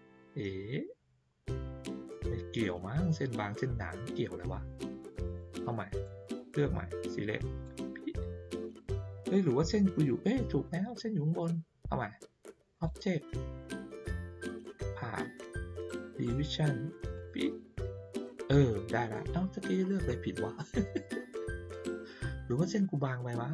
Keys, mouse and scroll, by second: 1.2-3.0 middle drag, 2.6 scroll down 1, 2.9-3.4 scroll up 2, 3.1 middle click, 5.2 click, 6.0-7.6 drag, 12.7 click, 17.1 click.